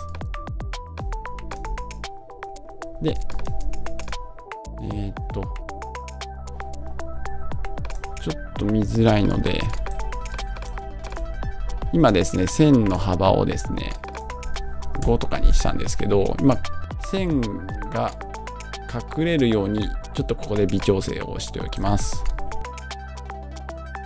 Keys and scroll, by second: 14.9 Home.